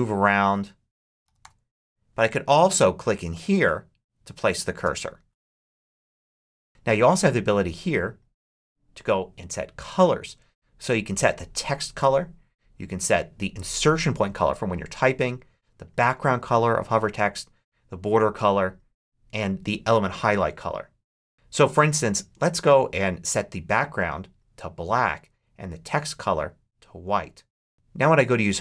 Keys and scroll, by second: 0.7-1.6 typing, 4.7 space, 5.5 BackSpace, 6.1 Left, 6.3 space, 6.6 Left.